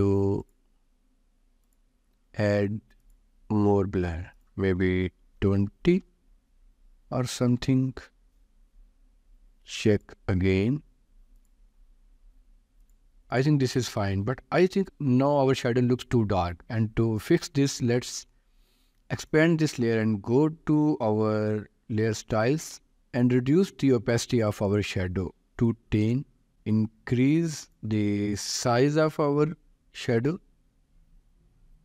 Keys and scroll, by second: 5.4 0, 5.9 Return, 25.8 5, 26.2 Return, 28.5 5, 28.9 Return.